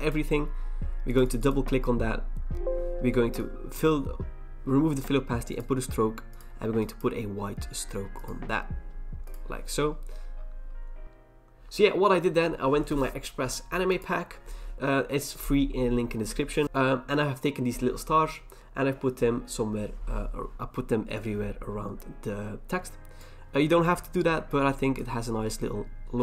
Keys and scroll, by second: 23.8 ctrl+t.